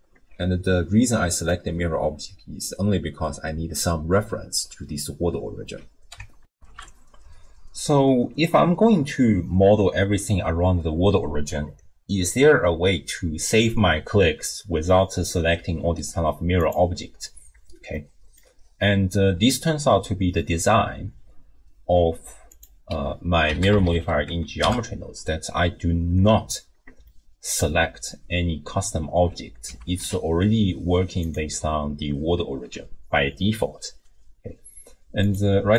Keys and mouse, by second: 6.5 ctrl+alt+shift+w, 6.7 ctrl+alt+shift+q, 16.6 click, 18.1 middle click, 22.5-24.7 drag, 23.8 r, 24.0 r, 27.2 middle click, 29.7 g, 35.2 click.